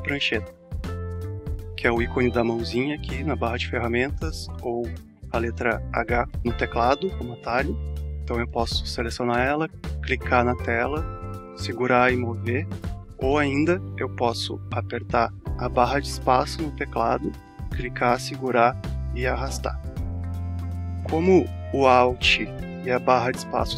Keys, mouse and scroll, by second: 8.6 click, 11.2 click, 17.7 space, 18.4 click.